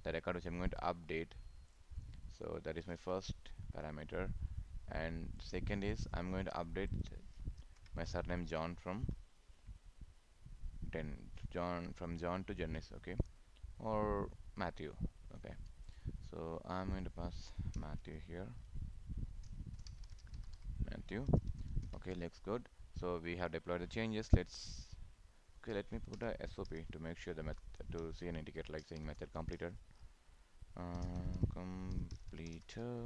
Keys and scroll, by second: 3.0 ctrl+v, 7.6 ctrl+c, 21.3 ctrl+s, 27.6 ctrl+Return.